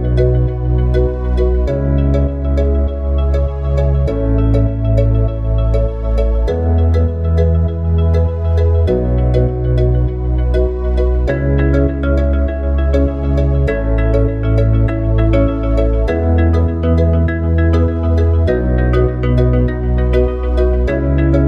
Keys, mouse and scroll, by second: 1.1 click, 3.1 ctrl+v, 3.5 click, 6.2 click, 10.3 click, 12.0 click, 14.5 click, 15.3 click, 16.8 click.